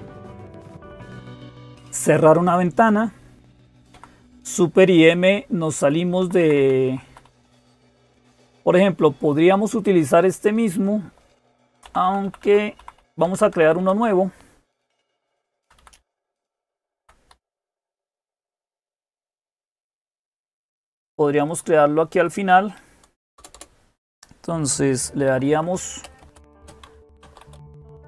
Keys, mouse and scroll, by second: 0.0-28.0 typing, 3.7 Down, 4.9 Left, 5.1 Left, 5.3 Left, 5.5 Left, 6.0 Down, 6.2 Down, 6.4 Down, 6.7 Up, 6.9 Up, 7.0 Up, 11.6 Down, 11.8 Down, 12.0 Down, 12.2 Down, 12.6 Up, 12.8 Up, 13.0 Down, 13.2 Down, 13.4 Down, 13.5 Down, 15.0 Down, 15.2 Down, 15.4 Down, 15.6 Down, 15.8 Down, 15.9 Down, 16.1 Down, 16.4 Down, 16.6 Down, 17.1 Down, 17.1 Up, 17.3 Up, 18.6 Down, 19.2 Down, 19.3 Down, 19.4 Down, 19.6 Down, 19.7 Down, 19.8 Down, 20.4 Down.